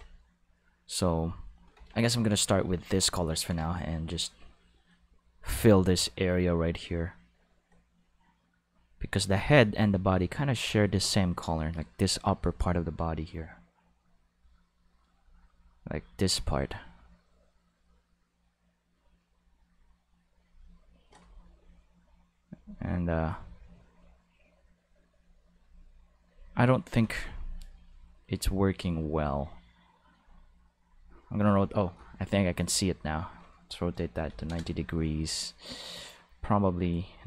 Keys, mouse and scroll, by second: 9.3-20.4 drag, 22.6-24.6 drag, 25.1 click, 25.6 click, 26.3 click, 26.9 click, 27.7-30.1 drag, 30.9 click, 32.9 click, 34.1 9, 34.3 0, 34.5 Return, 36.9 click.